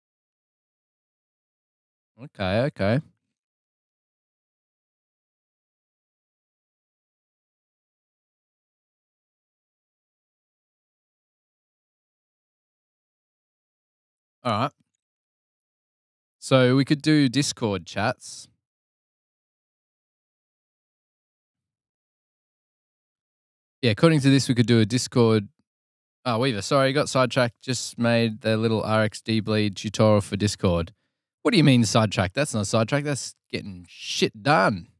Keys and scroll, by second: 15.8 super+Tab, 17.2 super+Tab, 18.0 super+Tab.